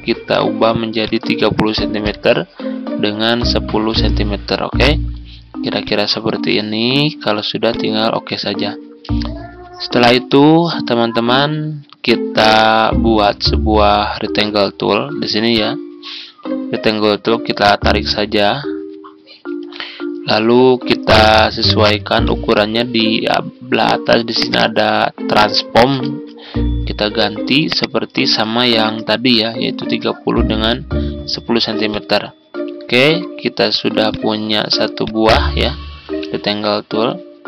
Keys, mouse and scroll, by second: 0.9 click, 1.7 typing, 3.8-20.3 drag, 25.4-26.3 typing, 27.6 click, 28.6-28.9 typing, 30.4 click, 36.4 ctrl+z.